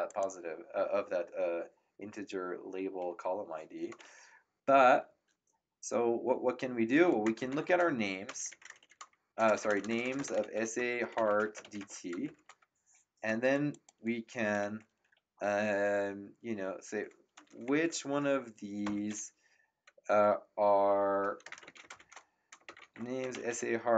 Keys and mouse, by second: 0.0 click, 7.0-12.3 typing, 13.7 click, 21.2-23.9 typing.